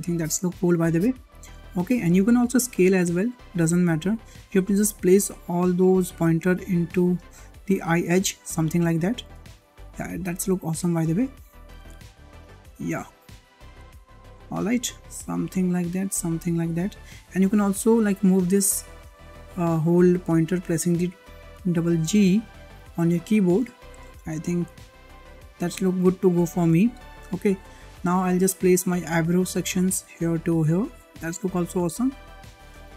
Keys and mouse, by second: 0.9 click, 1.1 click, 2.4 s, 5.3 click, 6.3 click, 7.5 click, 8.2 click, 8.3 click, 9.4 shift+middle click, 11.0 click, 11.1 click, 11.7 click, 12.5 shift+middle click, 13.5 click, 14.2 click, 14.9 click, 15.6 click, 16.6 click, 18.4 g, 20.2 click, 20.3 click, 21.8 shift+middle click, 23.2 shift+middle click, 23.8 click, 24.6 click, 25.0 click, 25.1 click, 26.0 click, 26.1 click, 27.2 shift+middle click, 27.8 shift+middle click, 28.5 click, 29.1 l, 29.8 click, 30.8 click, 30.9-32.1 drag, 32.5 click.